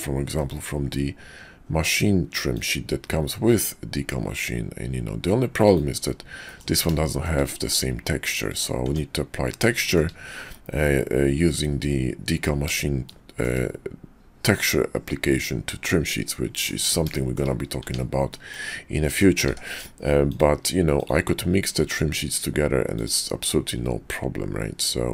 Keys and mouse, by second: 6.5 click, 6.5 middle click, 7.1 shift+click, 8.8 Tab, 9.8 shift+middle drag, 13.1-13.5 shift+middle drag, 14.6-16.7 middle drag, 17.2 shift+middle click, 17.8 Tab, 18.3 middle click, 19.0 middle click, 19.5 d.